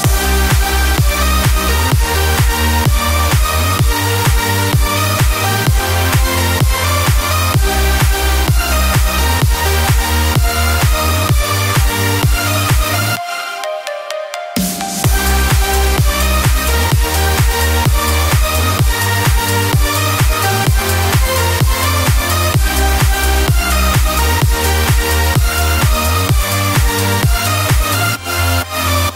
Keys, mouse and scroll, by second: 1.3 click, 2.2-4.4 drag.